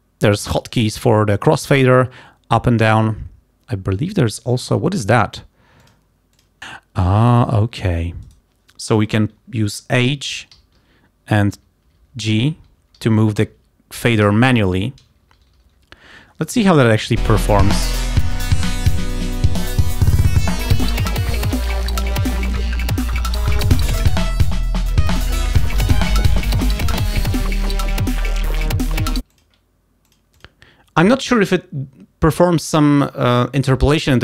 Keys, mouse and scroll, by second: 6.0 click, 6.6 scroll up 1, 10.1 h, 11.6-15.0 typing, 16.0 g, 17.3 click, 18.6 click, 20.5 h, 22.5 g, 25.2 h, 29.3 click, 30.2 click.